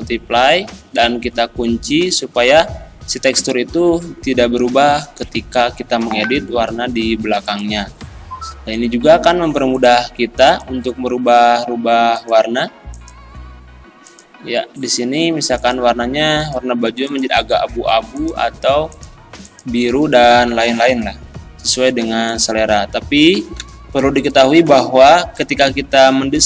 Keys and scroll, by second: 23.6 z.